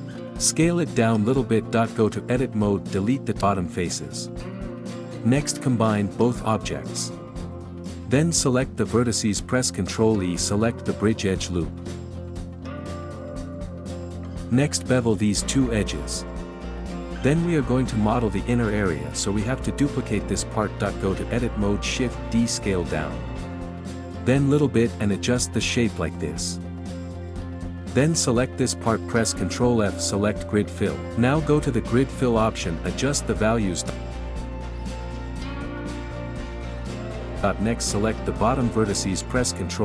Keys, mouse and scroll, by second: 0.4 s, 1.9 g, 2.7 ctrl+middle click, 3.6 click, 4.0 alt+shift+click, 4.4 x, 4.7 middle click, 5.3 Tab, 5.7 shift+click, 6.3 ctrl+j, 6.5 Tab, 6.8 click, 7.0 alt+shift+click, 7.7 alt+shift+click, 8.1 alt+shift+click, 8.5 middle click, 8.7 z, 8.9 middle click, 9.9 z, 10.1 z, 10.4 middle click, 10.8 z, 13.0 ctrl+e, 13.5 middle click, 14.0 alt+shift+click, 15.2 ctrl+b, 17.0 KP_1, 17.2 ctrl+KP_Add, 17.4 ctrl+KP_Add, 18.3 ctrl+KP_Add, 19.4 shift+d, 20.0 z, 20.4 ctrl+middle click, 20.9 s, 23.4 g, 25.2 click, 25.4 alt+shift+click, 26.1 g, 27.2 ctrl+middle click, 27.9 alt+shift+click, 28.1 middle click, 28.6 z, 28.8-29.8 middle drag, 29.8 ctrl+f, 30.6 middle click, 31.0 KP_7, 31.5 shift+middle click, 32.1-36.2 drag, 36.2 middle click, 36.5 Tab, 36.6 z, 36.8 scroll down 4, 37.0 ctrl+middle click, 37.3 middle click, 37.4 Tab, 37.5 z, 37.8 ctrl+middle click, 38.2 Tab, 38.4 click, 38.6 alt+shift+click, 39.3 ctrl+z, 39.6 alt+shift+click.